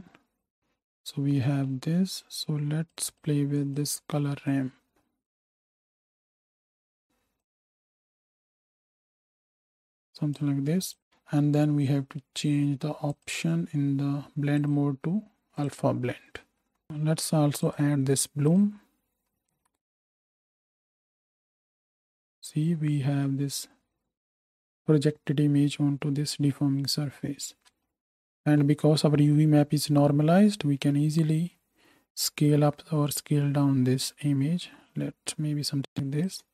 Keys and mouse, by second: 0.0 z, 0.6-3.7 middle drag, 3.7 click, 4.5-10.9 middle drag, 10.9-13.1 drag, 11.4 n, 13.1 middle drag, 13.3-14.6 drag, 14.6-18.6 middle drag, 16.6 n, 18.6-27.4 drag, 19.4 alt+a, 20.3 shift+Right, 20.4 shift+Left, 21.3 space, 27.4-31.1 right drag, 27.5 space, 31.1 shift+middle click.